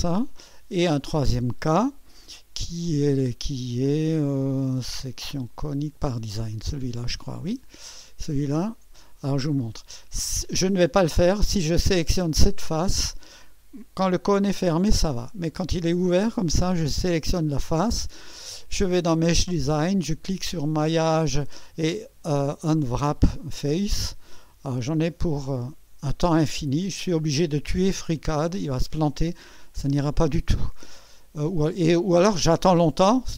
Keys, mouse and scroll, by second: 0.0 click, 2.3 click, 6.5-9.1 drag, 10.5 click, 11.9 click, 12.7-14.1 drag, 15.5-16.7 drag, 20.7 click, 24.4 click, 30.3 click.